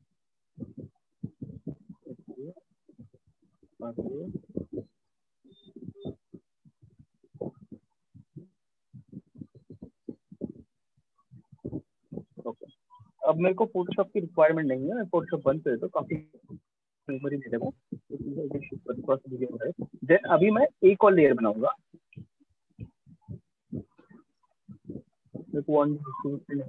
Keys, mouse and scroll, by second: 1.0 click, 2.8 click, 5.6 click, 6.6 click, 9.0 shift+click, 10.8 click, 12.0 alt+click, 13.4 click, 15.0 click, 20.4 click, 24.7 click.